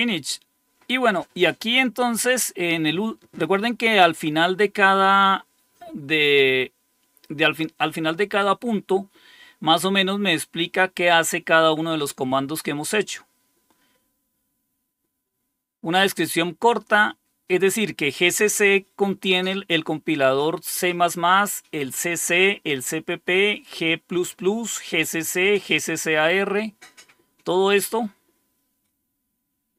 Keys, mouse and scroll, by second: 9.2 scroll down 1, 12.8 scroll down 1, 17.4-22.5 scroll up 2, 22.5-25.0 scroll up 1, 25.0-25.8 scroll up 1, 25.8-26.6 scroll up 1, 26.6-28.6 scroll down 5, 29.1-29.7 scroll down 6.